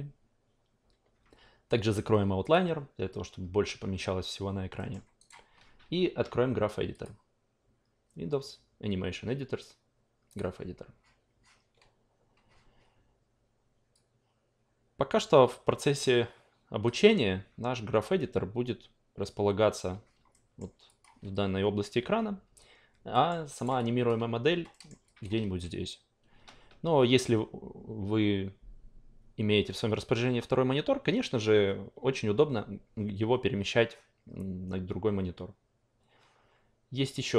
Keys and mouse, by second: 2.4 click, 4.8 alt+middle click, 5.2 alt+right click, 6.9 click, 10.3 click, 13.9-16.8 drag, 20.3 alt+middle click, 20.9 alt+click, 23.1 alt+middle click, 23.5 alt+right click, 23.8-24.1 alt+drag, 24.7 alt+middle click, 25.2 alt+click.